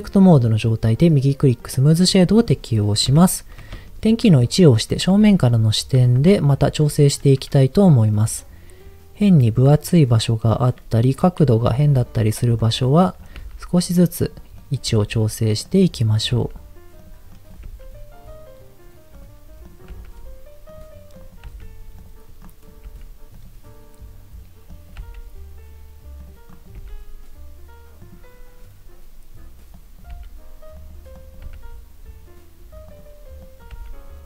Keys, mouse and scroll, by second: 1.0-2.1 right drag, 2.1 middle click, 2.5-3.0 scroll up 1, 3.0 KP_1, 3.9 shift+middle click, 5.5-5.9 scroll up 2, 5.9 Tab, 10.5 click, 11.7 shift+click, 12.5 click, 12.9 click, 13.3 g, 14.2 click, 14.5 click, 14.9 g, 16.0 click, 16.3 g, 16.9 click, 17.3 click, 17.7 g, 19.1 click, 19.7 click, 19.9 g, 21.1 click, 21.5 g, 21.9 click, 22.4 click, 22.9 g, 23.3 click, 24.7 click, 24.9 g, 26.1 click, 26.5 click, 26.7 g, 28.0 click, 29.7 click, 30.1 g, 30.7 click, 31.1 click, 31.5 g, 32.9 click, 33.3 click, 33.7 g.